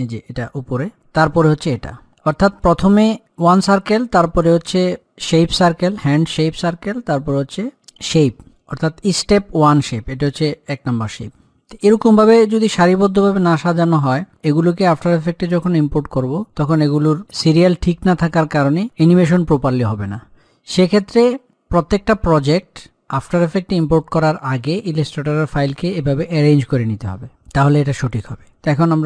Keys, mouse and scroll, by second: 1.5 click, 4.6 click, 7.9 click, 21.7-25.3 drag.